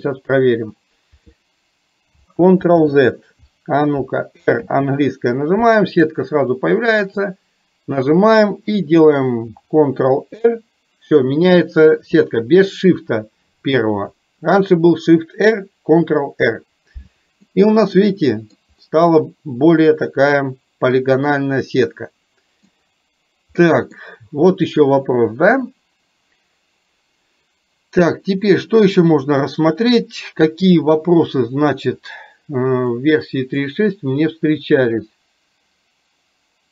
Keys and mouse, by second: 17.6-18.7 middle drag, 19.2-22.8 middle drag, 23.8 middle click, 29.3 click, 32.1 click, 32.8-33.8 drag.